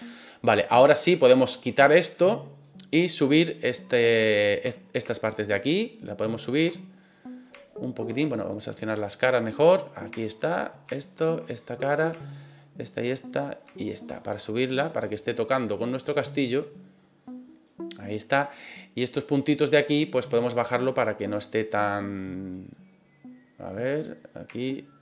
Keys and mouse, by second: 1.6 click, 2.6 middle click, 3.4 right click, 3.7 middle click, 5.0 shift+right click, 5.8 shift+right click, 6.4 shift+right click, 6.7 middle click, 8.9 click, 9.6 right click, 10.2 shift+right click, 10.5 middle click, 11.1 shift+right click, 11.4 middle click, 12.5 shift+right click, 12.8 shift+right click, 13.1 middle click, 13.8 shift+right click, 14.4-16.1 drag, 16.3-17.6 middle drag, 19.0 click, 19.3 middle click, 20.2 right click, 20.8-21.8 drag, 22.0-23.6 middle drag, 24.1 right click.